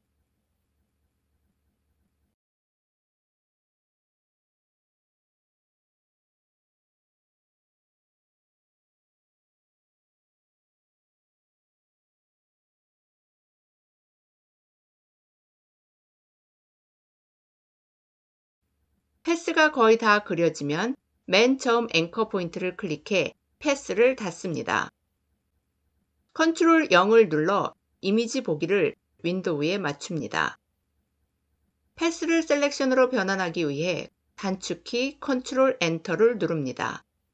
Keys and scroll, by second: 26.2 ctrl+0, 34.3 ctrl+Return.